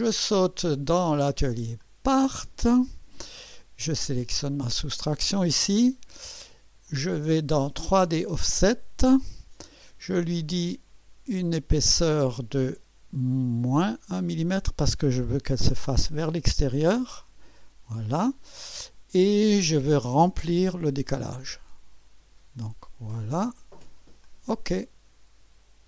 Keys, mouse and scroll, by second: 1.8 click, 4.0 click, 6.8 click, 8.2 click, 13.8 click, 16.2 -, 20.7 click, 24.2 click.